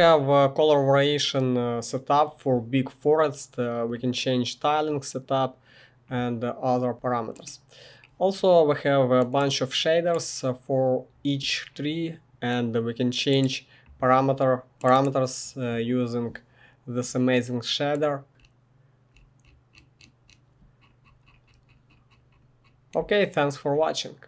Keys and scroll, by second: 0.0-1.0 typing, 18.3 typing, 22.6-23.3 typing.